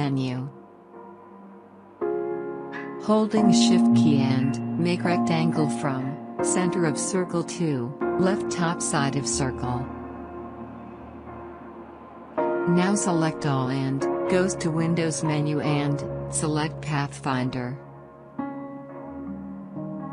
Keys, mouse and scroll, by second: 1.3-1.9 right drag, 1.9 click, 5.3-14.7 drag, 17.2 click.